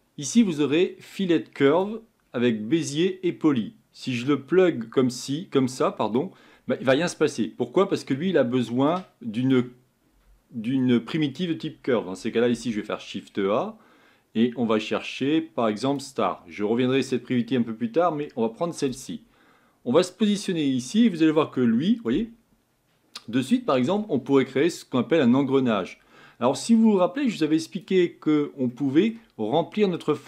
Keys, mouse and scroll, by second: 5.7 click, 6.5-7.1 scroll up 4, 7.1-7.6 scroll down 2, 7.6-15.9 middle drag, 20.3 click, 21.0-22.0 scroll up 6, 22.0 scroll up 1, 22.1-30.2 middle drag.